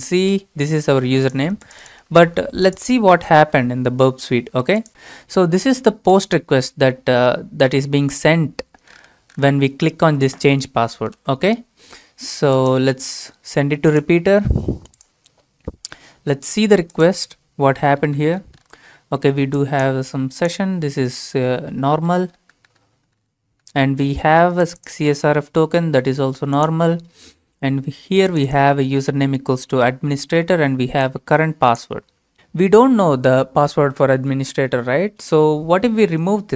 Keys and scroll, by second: 2.2 ctrl+c, 3.2 ctrl+a, 3.4 ctrl+v, 11.3 alt+Tab.